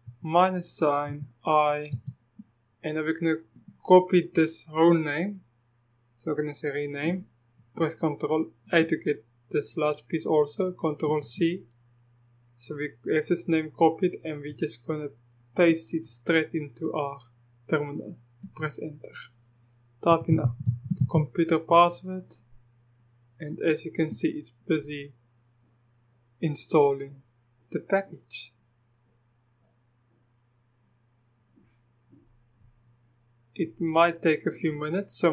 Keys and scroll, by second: 0.0-1.9 typing, 8.7 ctrl+a, 11.1 ctrl+c, 18.5 Return, 19.9-22.6 typing, 21.7 Return.